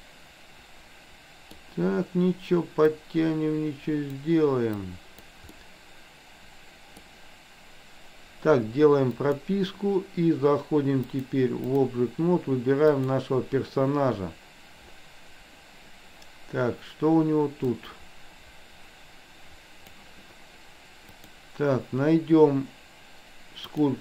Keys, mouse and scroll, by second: 3.0-4.1 drag, 4.8 click, 5.6-7.0 middle drag, 9.1 click, 11.0 click, 12.9 click, 17.6-19.9 drag, 21.3-23.9 drag.